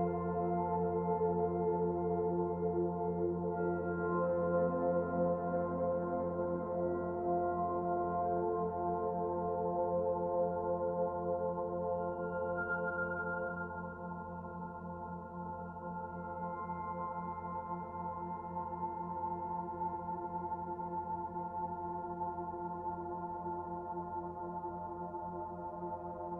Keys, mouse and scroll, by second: 0.7-1.2 scroll down 2, 1.2 middle click, 2.6 shift+middle click, 2.9 shift+middle click, 4.4 middle click, 13.5 middle click, 14.3 middle click, 16.2 click, 16.8 shift+middle click, 19.3 middle click, 20.4 shift+click, 23.8 Delete.